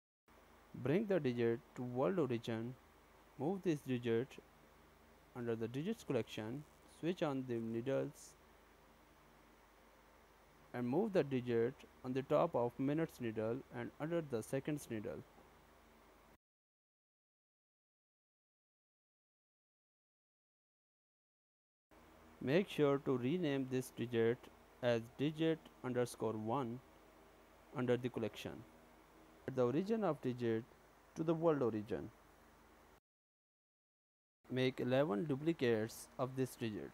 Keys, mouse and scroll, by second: 4.8 click, 7.1 click, 7.8-9.3 scroll down 11, 9.3 shift+middle click, 10.5-11.2 scroll down 3, 11.2-11.8 scroll up 1, 12.2 g, 17.1 KP_Decimal, 17.8-20.1 scroll down 8, 18.5 s, 22.7 g, 27.9-29.2 scroll down 4, 29.5 shift+middle click, 30.8-31.5 scroll up 8, 31.5 shift+middle click, 32.0-32.4 scroll up 3, 32.7 shift+middle click, 33.8 click, 34.3 click, 35.6 shift+d, 36.0 shift+d.